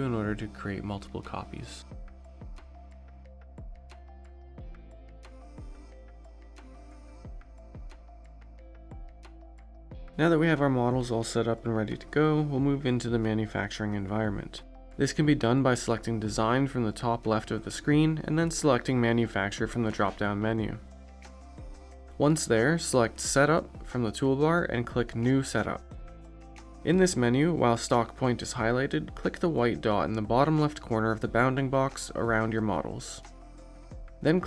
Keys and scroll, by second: 8.5 ctrl+z.